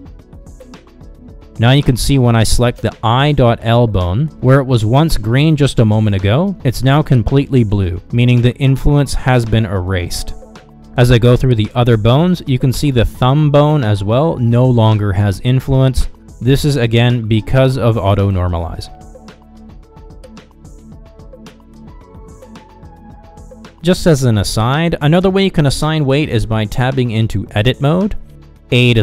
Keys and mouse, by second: 1.8 click, 2.3 middle click, 9.0 Down, 10.4-12.8 middle drag, 14.1-16.1 middle drag, 16.8 Down, 17.3 Down, 20.7 Down, 21.1 Down, 21.5 Down, 22.1 Down, 22.5 Down, 22.9 Down, 23.2 Down, 24.1 middle click, 24.6 click, 24.9 middle click, 25.6 middle click, 27.3 ctrl+Tab.